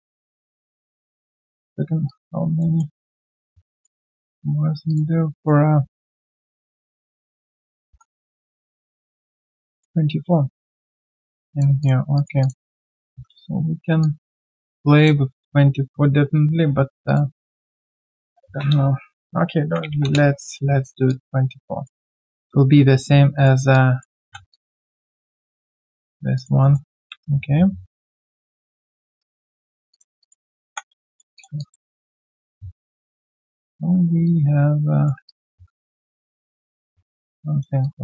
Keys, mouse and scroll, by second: 2.6 alt+middle click, 3.0 alt+click, 6.5 right click, 7.5 double click, 8.7 1, 8.9 alt+middle click, 11.5 alt+right click, 11.8 alt+click, 12.7 alt+middle click, 13.1 alt+w, 19.4-20.3 typing, 20.8 alt+right click, 21.0 alt+click, 23.7 alt+click, 24.2 alt+w, 26.3 alt+click, 26.6 alt+middle click, 26.9 alt+click, 27.1 r, 29.5 alt+click, 30.2 double click, 31.3 alt+click, 31.9 alt+middle click, 33.8 typing, 35.2 alt+click, 37.8 alt+click.